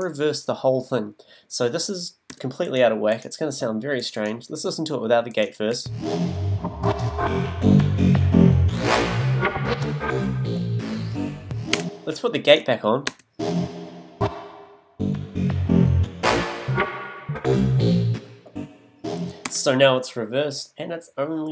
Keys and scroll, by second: 2.3 b, 5.7 space, 11.7 space, 13.1 space, 19.5 space.